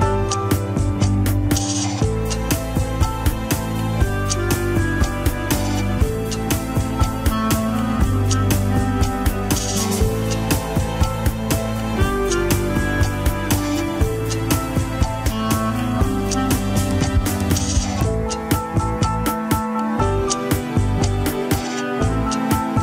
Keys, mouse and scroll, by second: 0.3 alt+z, 0.7 middle click, 1.2 shift+z, 1.4-4.0 middle drag, 4.3 ctrl+click, 5.4 ctrl+click, 5.8 alt+z, 6.8 ctrl+click, 7.3-9.8 middle drag, 10.5 alt+z, 10.7-13.2 middle drag, 13.7 ctrl+click, 17.9-19.6 middle drag, 19.6 ctrl+click, 19.7 alt+z, 19.8 scroll up 2, 20.1 shift+middle click, 20.7 scroll down 1, 21.1 g.